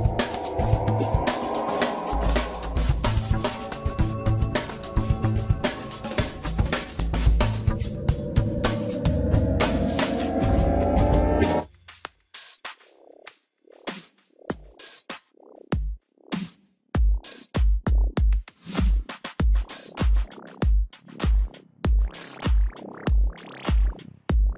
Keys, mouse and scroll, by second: 2.4 scroll down 1, 4.1 shift+z, 7.5 shift+d, 10.6 r, 15.3-16.0 shift+middle drag, 16.0 scroll down 1, 18.0 shift+d, 20.9 r, 23.7-24.2 scroll up 1, 24.2 shift+middle drag, 24.4-24.5 scroll up 2.